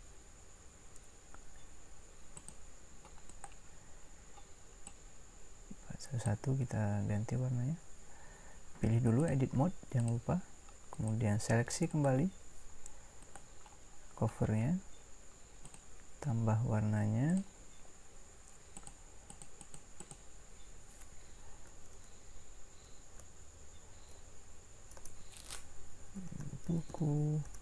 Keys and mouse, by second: 3.3-6.3 drag, 3.3-5.0 right drag, 21.9 Delete.